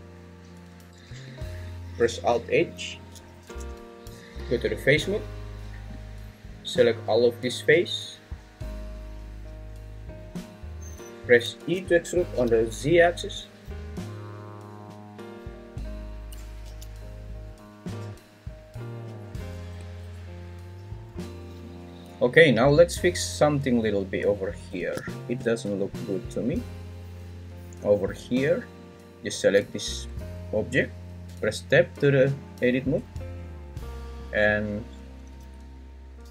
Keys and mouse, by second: 1.7 alt+g, 3.1 alt+h, 4.7 3, 6.0-9.7 drag, 12.1 e, 12.4 z, 16.9 z, 31.2 Tab.